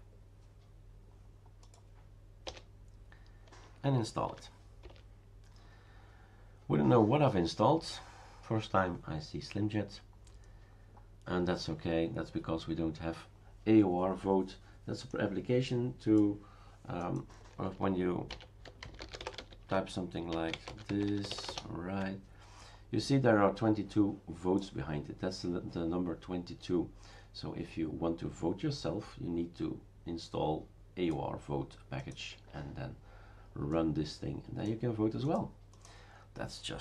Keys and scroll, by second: 2.4 Return, 4.3 y, 4.8 Return, 18.1-22.0 typing.